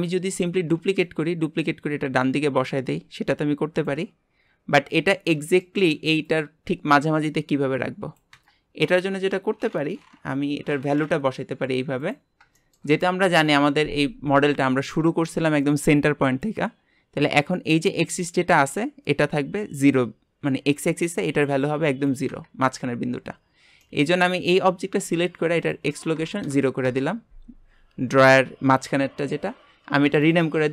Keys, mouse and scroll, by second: 0.5 shift+d, 1.9 click, 4.9-8.6 middle drag, 12.0 click, 12.5 shift+middle click, 13.2 KP_1, 14.0-15.2 scroll down 5, 22.7 scroll up 3, 23.8 middle click, 24.3-24.7 scroll up 1, 25.6-28.6 drag, 30.3-30.7 drag.